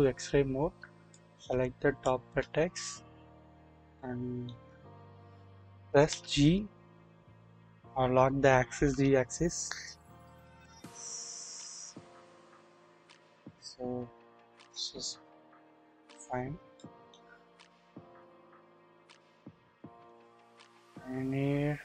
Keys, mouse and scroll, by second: 1.1-2.1 drag, 2.6 scroll down 1, 3.9 shift+middle click, 6.1 g, 6.1 g, 8.8 typing, 13.1-15.8 drag, 16.6 scroll up 1, 16.7-17.1 shift+middle drag, 17.8 scroll down 1, 18.1 typing, 19.3-20.1 shift+middle drag, 21.7 alt+z.